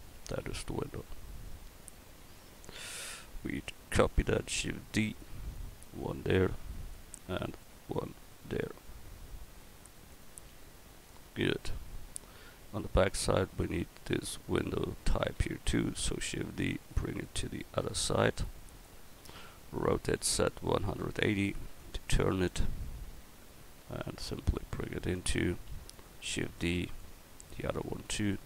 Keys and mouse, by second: 4.9 shift+d, 5.5-7.4 drag, 7.4 shift+d, 7.9-10.1 drag, 10.4 a, 14.1-14.9 right drag, 15.9 shift+d, 19.9 r, 22.5-25.1 drag, 26.3 shift+d, 27.0-28.4 drag.